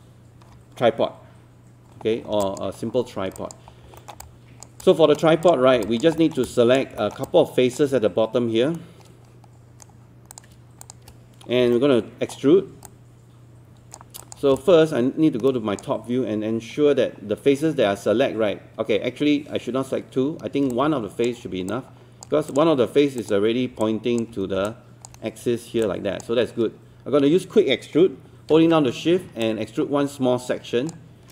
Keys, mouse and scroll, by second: 2.2 scroll down 1, 2.4 alt+click, 3.4 alt+click, 3.8 scroll up 1, 4.0 alt+middle click, 4.2 alt+click, 4.8 alt+click, 5.5 click, 5.9 alt+click, 6.2 alt+middle click, 6.4 alt+click, 7.0 alt+middle click, 7.2 alt+click, 8.8 right click, 10.3 click, 10.8 shift+click, 11.5 scroll up 1, 11.8 alt+middle click, 12.9 alt+click, 14.2 alt+click, 14.6-16.6 drag, 17.1 scroll down 1, 17.9-20.7 scroll up 1, 20.7 click, 21.7 alt+click, 22.5 click, 23.8 alt+click, 24.7 alt+click, 25.8 alt+click, 29.4-30.9 shift+drag.